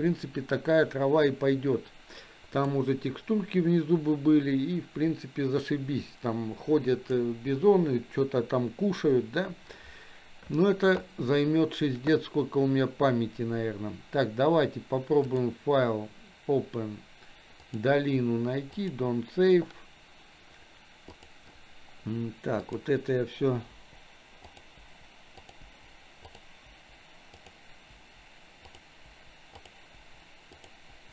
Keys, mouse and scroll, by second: 2.5 click, 15.3-19.3 drag, 21.1 click, 22.6 click, 23.8 Delete, 24.5 click, 25.2 Delete, 25.4 click, 25.7 Delete, 26.3 click, 26.7 Delete, 27.4 click, 27.9 Delete, 28.7 click, 29.8 Delete, 30.0 Delete, 30.6 click, 31.0 Delete.